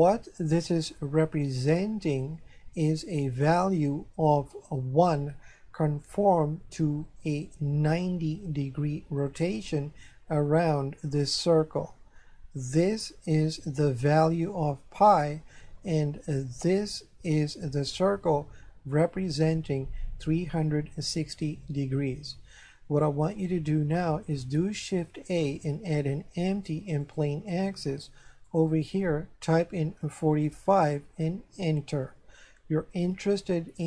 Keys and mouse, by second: 12.9 right click, 16.8 right click, 24.9 shift+a, 27.0 click, 28.5 click, 30.0 KP_4, 30.4 KP_5.